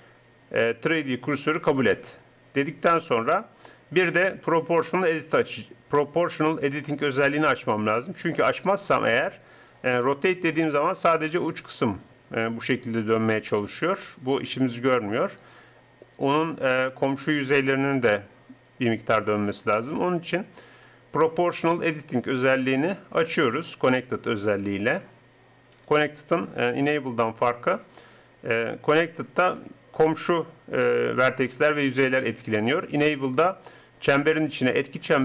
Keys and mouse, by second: 7.1-8.9 drag, 10.1 r, 12.7 r, 19.7-21.5 drag, 27.7-35.2 middle drag.